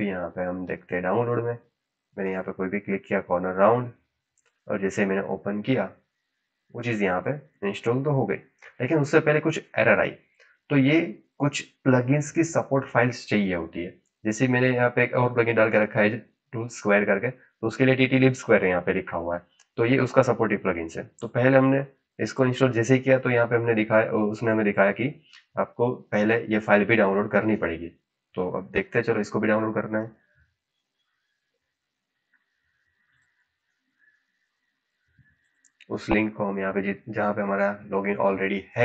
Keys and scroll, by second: 34.0 ctrl+c.